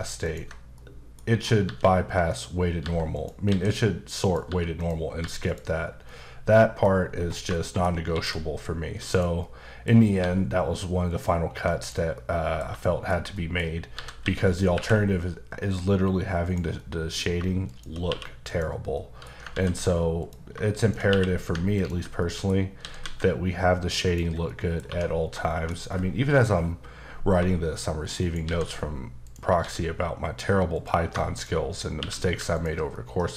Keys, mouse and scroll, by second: 0.2 ctrl+click, 0.7 middle click, 1.2-1.6 scroll up 2, 1.6 g, 2.3 click, 2.8 g, 3.1 click, 3.5 s, 4.2 click, 4.4 g, 4.7 click, 5.2 g, 5.4 click, 6.1 middle click, 7.1 scroll down 1, 7.5 shift+middle click, 8.1 shift+d, 9.1 click, 9.4 middle click, 10.2 g, 11.1 click, 11.5 g, 11.8 click, 12.1 middle click, 12.8 shift+middle click, 13.9-14.7 typing, 16.4 click, 16.8 middle click, 17.6 shift+click, 17.9 click, 18.1 q, 18.4 click, 18.9 middle click, 19.5 ctrl+z, 20.2 click, 20.8 shift+click, 21.0 click, 21.1 q, 21.7 ctrl+click, 22.2 middle click, 22.8 typing, 24.0 click, 24.4 middle click, 24.9 1, 25.2 scroll down 1, 25.5 shift+middle click, 28.2 shift+right click, 28.6 a, 29.2 click, 29.6 s, 30.7 click, 31.3 shift+click, 31.5 click, 32.0 q, 32.5 ctrl+click, 32.9 middle click.